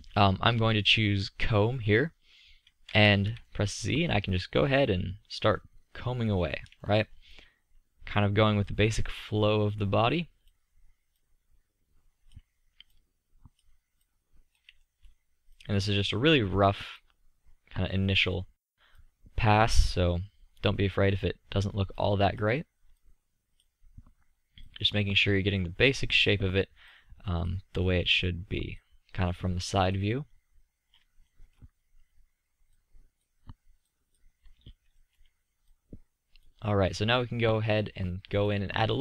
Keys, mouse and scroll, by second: 3.0 z, 8.6-13.0 drag, 14.9-20.1 drag, 25.4-31.3 drag, 31.3-32.8 middle drag, 32.8-34.7 drag, 34.7-37.0 middle drag, 38.8-39.0 middle drag.